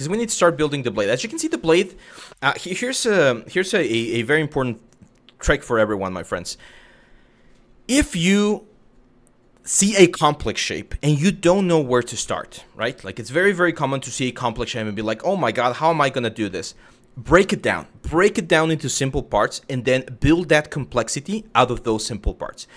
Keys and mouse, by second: 0.9 shift+middle drag, 11.3 middle drag, 11.9-12.2 middle drag, 12.4 KP_1, 13.2 shift+middle drag, 14.2 middle click, 14.7-15.1 middle drag, 16.2 middle click.